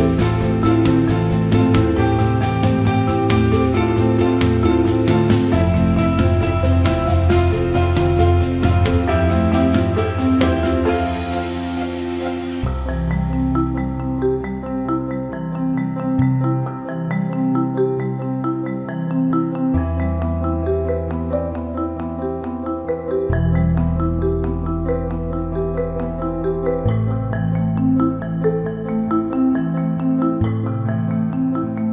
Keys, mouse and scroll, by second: 0.5 click, 1.6 shift+click, 2.1 shift+click, 2.7 alt+middle click, 5.0-7.0 drag, 7.2 alt+middle click, 9.6 click, 10.1 click, 10.7 shift+click, 11.0 alt+middle click, 12.2 alt+middle click, 14.2-19.4 drag, 20.0-21.4 alt+middle drag, 31.3 alt+middle click.